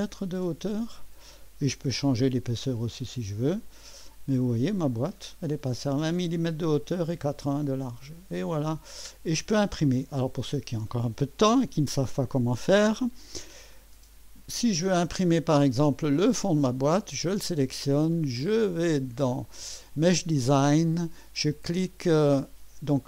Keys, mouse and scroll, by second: 1.8 typing, 3.5 click, 5.0-10.2 drag, 15.5 click, 18.5 click, 19.9 click.